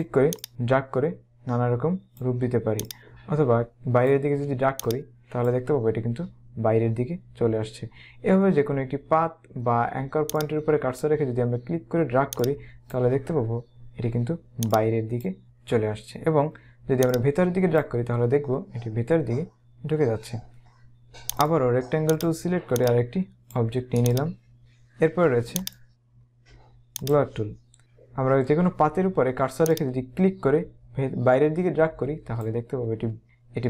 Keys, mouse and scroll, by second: 4.6 space, 4.8 click, 5.2 space, 10.4 click, 12.4 click, 14.8 click, 17.1 click, 21.5 right click, 22.1 click, 22.8 click, 23.9 space, 24.1 click, 24.5 space, 25.7 right click, 27.2 click, 27.8 z, 29.8 click.